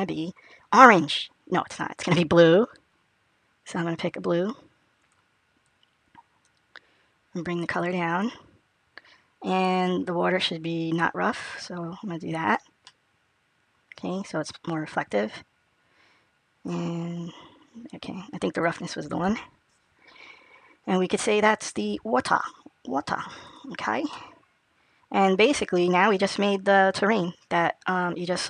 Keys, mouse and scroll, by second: 1.1 click, 10.8 click, 12.7 middle click, 16.5 click, 23.3 click, 24.0 middle click.